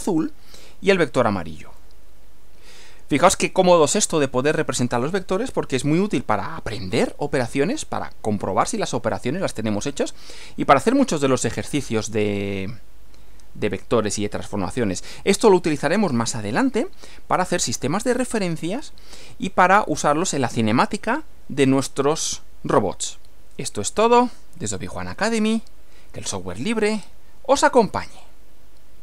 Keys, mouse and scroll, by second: 1.8-4.8 middle drag, 9.9-14.0 middle drag, 15.2-16.3 middle drag, 18.4-20.6 middle drag, 28.0 click.